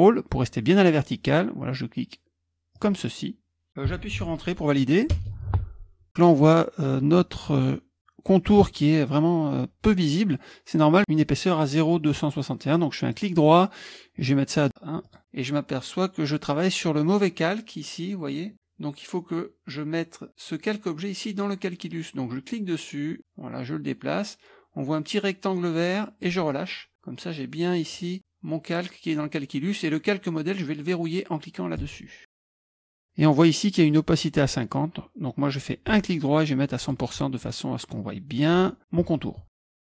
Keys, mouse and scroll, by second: 5.2 Return, 24.7-26.7 drag, 37.3-40.0 drag.